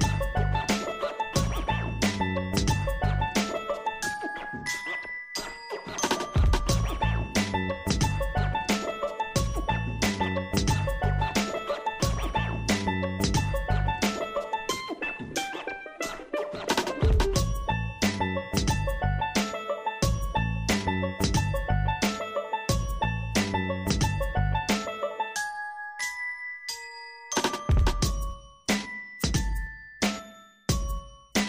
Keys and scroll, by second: 9.9 ctrl+a, 14.1 ctrl+c, 20.0 ctrl+alt+shift+v.